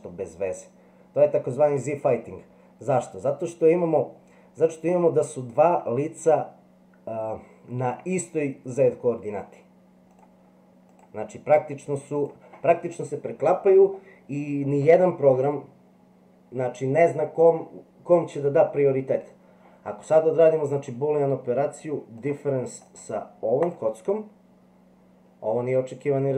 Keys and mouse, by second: 11.0 click, 22.2 click.